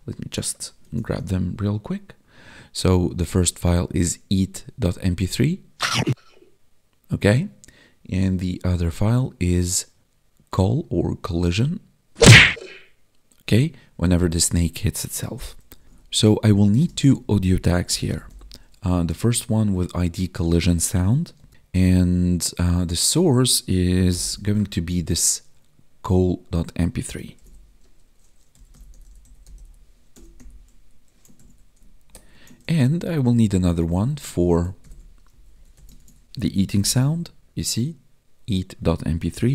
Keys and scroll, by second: 0.8 ctrl+b, 15.6 ctrl+w, 15.8 ctrl+s, 21.5 Tab, 24.0 ctrl+b, 27.3 ctrl+b, 31.3 ctrl+s, 32.0 alt+shift+Down, 32.5 ctrl+s, 32.9 ctrl+Down, 33.7 Left, 34.3 Left, 35.9 ctrl+s, 36.7 ctrl+b, 39.4 ctrl+b.